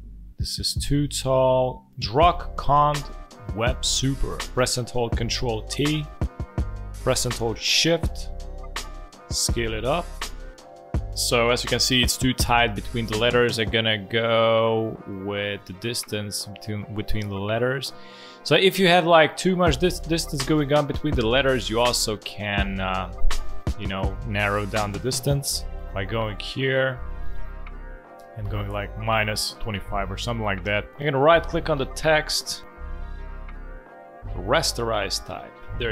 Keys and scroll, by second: 5.5 ctrl+t, 11.7 ctrl+a, 25.2 ctrl+a.